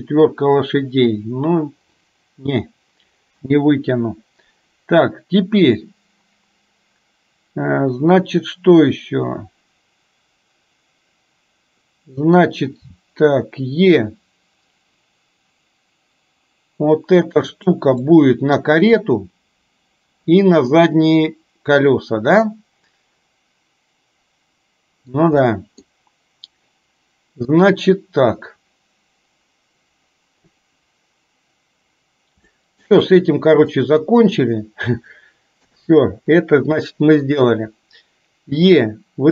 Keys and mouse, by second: 13.0 e, 18.1 middle click, 21.1-25.2 middle drag, 25.5 middle click, 32.5 shift+middle click, 33.1 middle click, 35.7 KP_7, 37.0 shift+middle click, 38.6 e.